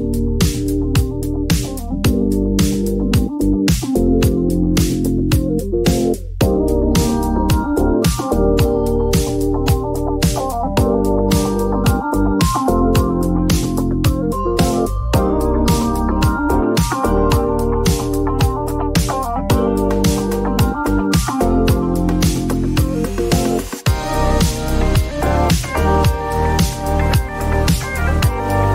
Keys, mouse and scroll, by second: 0.5 click, 7.0 click, 9.4-10.2 drag, 11.5 click, 15.2 click, 16.1 alt+click, 18.7-20.9 typing, 22.5 click, 22.6 click, 24.0-26.6 typing, 27.0 Return.